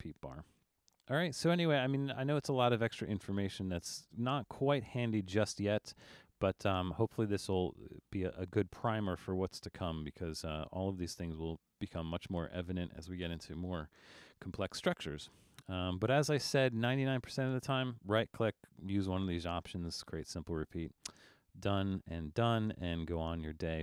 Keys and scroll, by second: 22.7 Up.